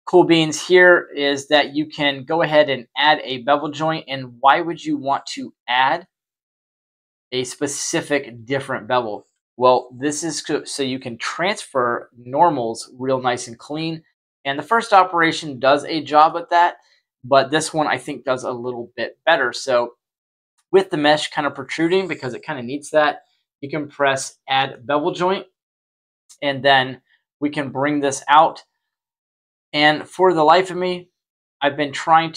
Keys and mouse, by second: 6.4-7.9 middle drag, 14.3-14.6 middle drag, 16.2-17.5 middle drag, 24.1 click, 26.7 y, 27.8-32.3 middle drag.